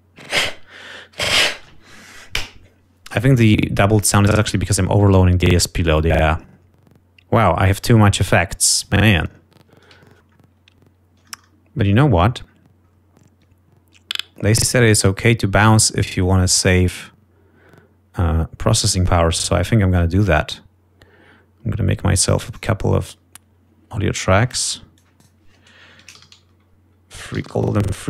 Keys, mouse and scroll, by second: 7.7 scroll down 2, 8.2-9.5 drag, 9.6 scroll down 2, 10.2-10.6 scroll up 3, 11.1-11.5 scroll up 2, 11.9-12.5 ctrl+scroll up 4, 12.9-13.6 scroll down 4, 13.7 scroll up 2, 15.1-16.0 scroll down 4, 17.4 click, 18.0 scroll up 2, 18.9 scroll up 2, 19.4 right click, 21.6-22.0 scroll up 2, 22.9-23.9 drag, 25.7 click, 26.4-28.0 typing.